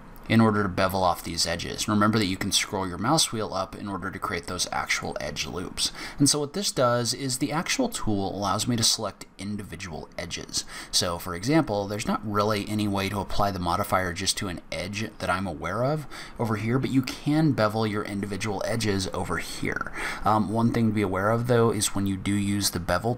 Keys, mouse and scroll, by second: 5.6-6.0 scroll down 3, 6.0 scroll up 2, 6.7 middle click, 13.8 scroll down 2, 14.1-14.5 scroll up 2, 16.7 scroll down 1, 17.1 scroll up 1, 17.8 scroll up 1, 20.3 scroll down 2, 20.9 scroll up 1.